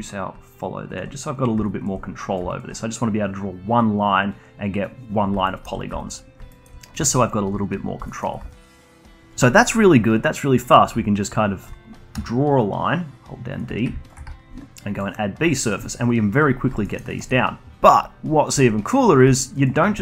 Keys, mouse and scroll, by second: 5.4 alt+middle click, 5.9 alt+click, 6.5-8.4 alt+middle drag, 8.4-11.0 alt+drag, 12.1 d, 12.6-13.6 drag, 13.6 d, 14.0 alt+shift+click, 14.9-16.8 drag, 16.8 alt+middle click, 17.0-19.6 alt+drag, 19.6 alt+middle click.